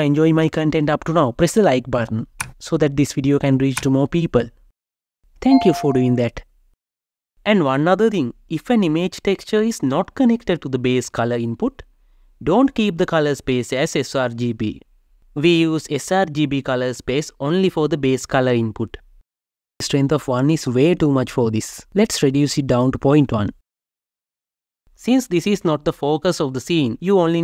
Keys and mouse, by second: 11.1-18.5 drag, 20.5-22.7 drag.